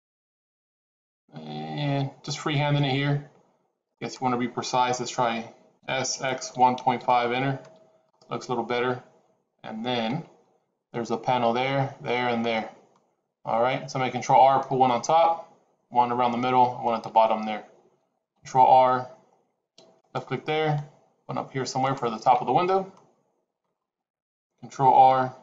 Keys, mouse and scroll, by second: 5.7 s, 18.2 ctrl+r, 24.8 ctrl+r.